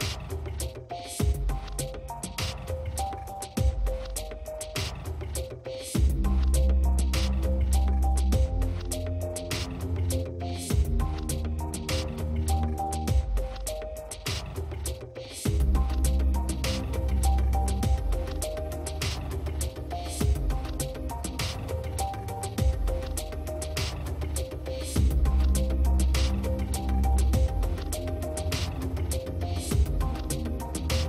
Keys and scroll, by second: 26.0 space.